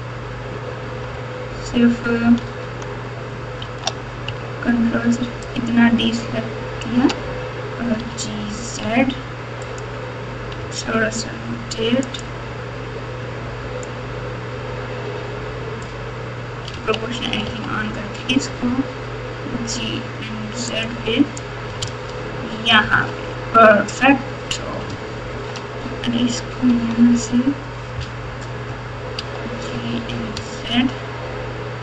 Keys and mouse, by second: 2.4 alt+z, 3.6 alt+z, 5.5-6.8 ctrl+drag, 7.9 g, 10.6 r, 13.8 click, 14.0-15.8 drag, 16.7 o, 17.4 g, 21.4 click, 21.7 alt+click, 22.8 alt+z, 25.3 ctrl+r, 29.1 g.